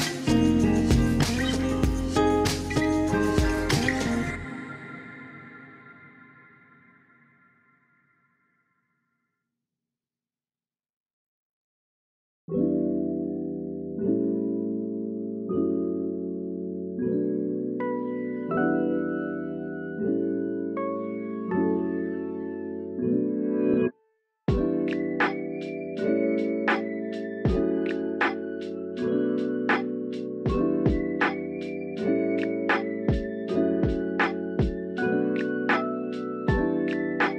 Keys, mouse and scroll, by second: 0.0 click, 0.5 e, 1.8 r, 2.3-3.5 drag, 3.9 KP_1, 5.7-7.3 drag, 8.1-9.2 drag, 9.7 click, 10.8 alt+shift+click, 11.7 click, 12.8 middle click, 14.7 alt+shift+click, 15.6 alt+shift+click, 16.4 KP_3, 16.9 shift+middle click, 18.1 shift+middle click, 18.6 click, 19.4 e, 20.7 KP_1, 22.1 shift+middle click, 22.9 g, 23.5 click, 24.1 r, 25.0 click, 28.3 click, 29.8 r, 30.4 click, 30.6 g, 32.7 click, 33.1 Tab, 33.3 click, 33.6-35.3 middle drag, 36.9 KP_1.